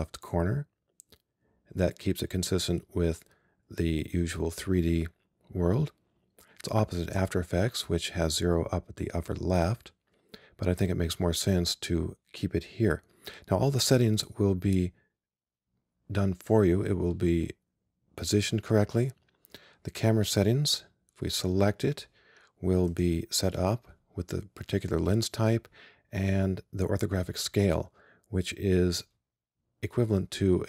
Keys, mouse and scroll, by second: 21.4-23.0 right drag.